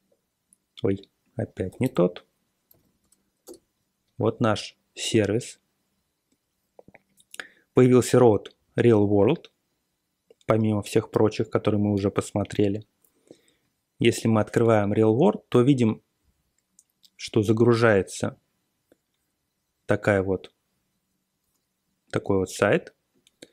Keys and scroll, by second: 0.8-3.2 typing, 3.4 Return.